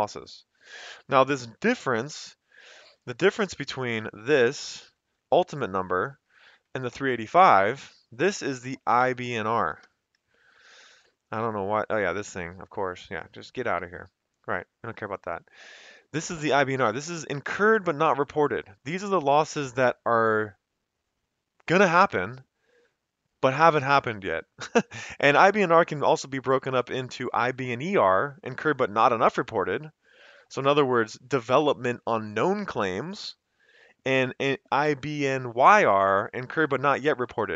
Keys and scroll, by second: 3.5 =, 4.0 Left, 4.9 -, 5.3 Left, 5.5 Left, 5.7 Left, 6.0 Left, 6.2 Left, 6.9 Return, 7.4 Up, 7.6 Up, 8.6-10.0 typing, 13.7 Delete.